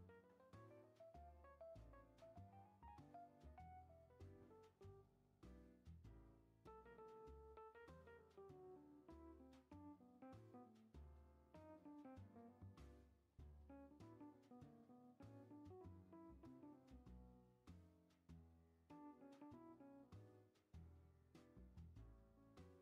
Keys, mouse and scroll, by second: 1.8-4.4 drag, 6.7 scroll up 1, 6.8-8.7 middle drag, 8.7-10.6 drag, 10.6 scroll up 1, 10.7-11.3 middle drag, 11.3-12.1 scroll down 1, 14.3-14.7 middle drag, 14.7 r, 16.8-18.3 middle drag, 18.3 scroll down 3, 18.4 shift+scroll up 1, 19.2-20.5 middle drag, 20.5-20.9 drag, 20.9-21.5 shift+middle drag, 21.5-22.6 drag, 22.6 scroll up 1.